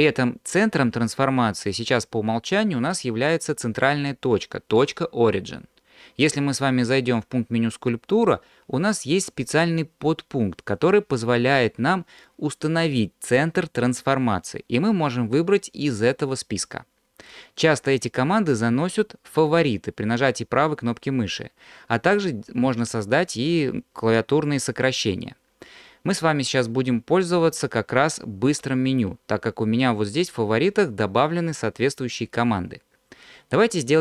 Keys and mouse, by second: 8.3-25.8 drag, 28.5 q.